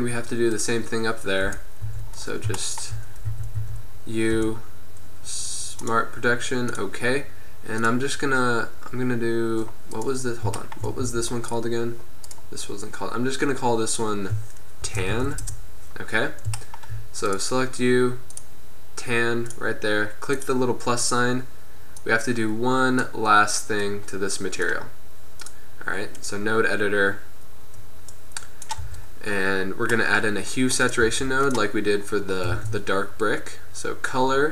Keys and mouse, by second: 0.7 right click, 1.5 KP_1, 2.0 Tab, 3.4 a, 3.7 a, 4.4 u, 9.6-11.2 middle drag, 11.2 Tab, 11.7 right click, 13.4-14.2 middle drag, 16.4-17.4 middle drag, 17.4 right click, 18.4-19.6 middle drag, 20.3 middle click, 22.3 click, 22.7-24.0 drag, 25.0-28.9 drag, 28.9 n, 29.9 click, 31.0-32.9 right drag, 31.3 g, 32.9 shift+a.